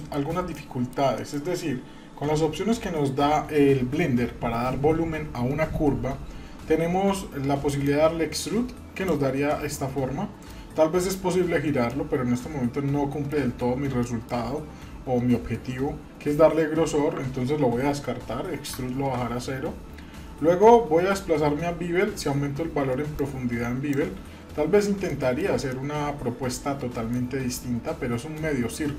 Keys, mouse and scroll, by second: 0.5-0.9 middle drag, 1.2 shift+middle click, 7.8-9.1 drag, 9.5-10.5 middle drag, 11.9-13.2 middle drag, 13.6-13.9 scroll up 1, 14.0-14.3 shift+middle drag, 14.4-16.7 scroll up 2, 19.0 ctrl+z, 20.1-22.1 scroll down 4, 23.2 click, 25.1-25.4 shift+middle drag, 25.7-27.1 middle drag, 27.1-27.6 scroll down 1, 27.6-28.4 middle drag, 28.5-28.9 scroll down 1.